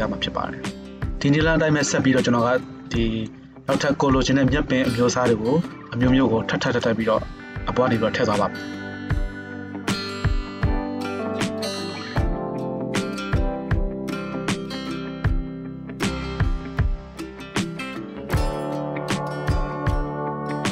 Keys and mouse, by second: 1.2 z, 6.1-9.2 drag, 9.2 middle drag, 9.4-20.7 drag.